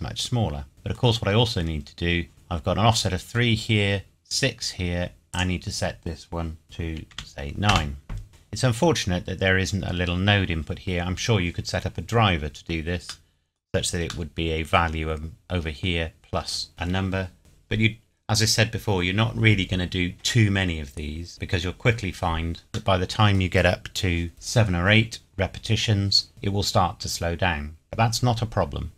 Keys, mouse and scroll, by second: 0.1-0.7 scroll down 1, 0.7 middle click, 1.3-2.1 scroll up 1, 5.3 click, 7.1 KP_9, 7.7 KP_Enter, 13.3 middle click, 14.0-14.3 scroll up 1, 14.3 middle click, 16.7-17.5 scroll down 1, 19.9-21.4 scroll down 1, 22.9 middle click.